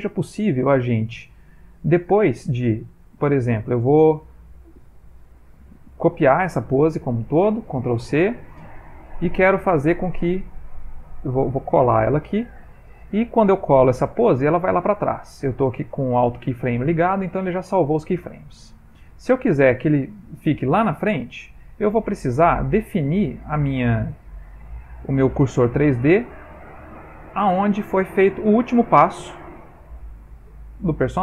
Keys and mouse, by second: 6.9 a, 8.2 ctrl+c, 10.1 click, 12.0 ctrl+v, 18.0 click.